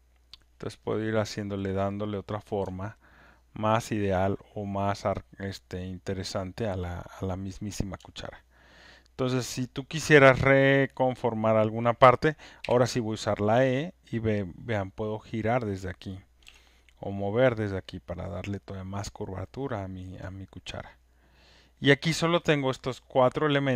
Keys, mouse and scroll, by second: 3.1 alt+middle click, 3.9 alt+click, 4.3-5.0 alt+scroll, 5.0 click, 7.4 alt+middle click, 9.3 alt+click, 9.9 alt+right click, 11.2 click, 12.7 alt+middle click, 16.2 click, 16.2 e, 16.4 w, 17.2 click, 17.8 e, 18.3-21.0 drag, 21.8 click, 22.7 click.